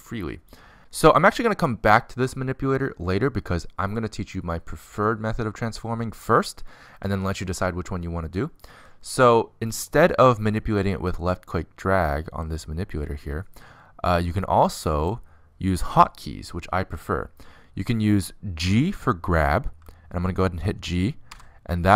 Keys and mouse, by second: 12.9-21.8 drag, 21.8 g.